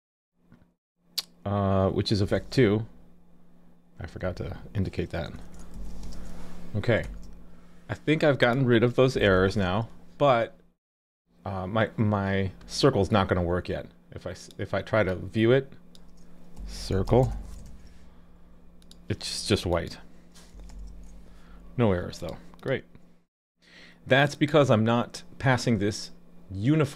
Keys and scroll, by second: 7.0 super+s, 9.3 alt+super+j, 11.2 alt+super+j, 17.7 super+s, 20.7 alt+super+j.